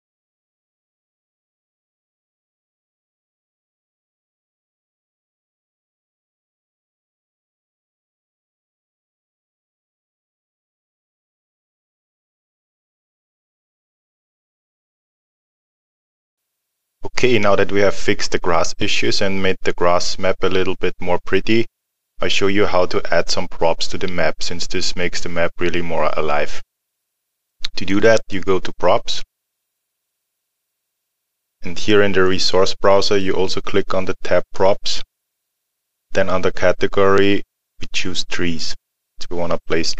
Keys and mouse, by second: 0.0 click, 0.1 middle click, 0.2 click, 1.2 alt+middle click, 1.6 middle click, 1.8 click, 3.7 middle click, 3.9 click, 4.5 middle click, 4.7 click, 5.5 middle click, 5.7 click, 6.1 middle click, 6.2 click, 6.4 middle click, 6.5 click, 6.8 middle click, 7.1 click, 7.4 middle click, 7.6 click, 7.8 middle click, 7.9 click, 8.6 alt+middle click, 9.1 middle click, 9.3 click, 10.7 middle click, 11.2 click, 11.5 middle click, 11.7 click, 13.9 click, 15.0 alt+middle click, 16.3 click, 29.2 click, 34.5 click, 37.7 click.